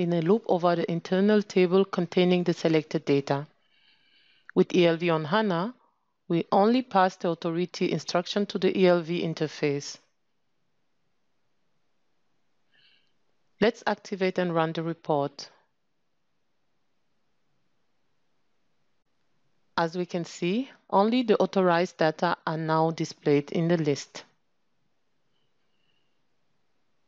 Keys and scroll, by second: 0.0 ctrl+space.